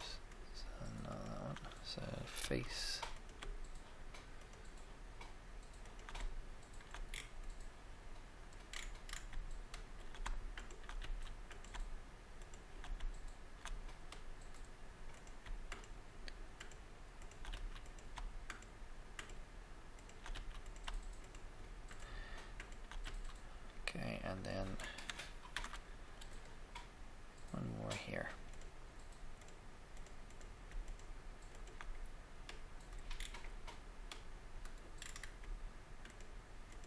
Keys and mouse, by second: 2.4 f, 5.6-7.2 shift+drag, 7.2 middle click, 10.5 shift+right click, 10.9 f, 11.0 f, 11.5 click, 11.8 right click, 15.1-17.8 right drag, 17.4 f, 17.5 f, 20.3 f, 20.3 f, 23.0 f, 23.3 f, 25.5 ctrl+r, 25.5 ctrl+r, 29.4 right click, 30.0 click, 33.1-34.3 middle drag, 36.0-36.8 shift+middle drag.